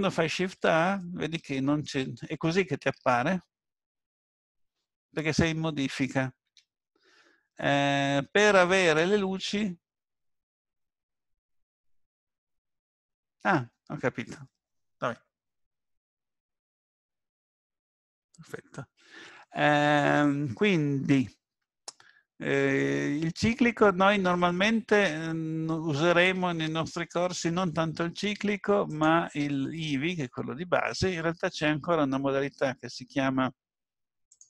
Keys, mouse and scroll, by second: 0.6 shift+a, 28.9 click, 34.3 click.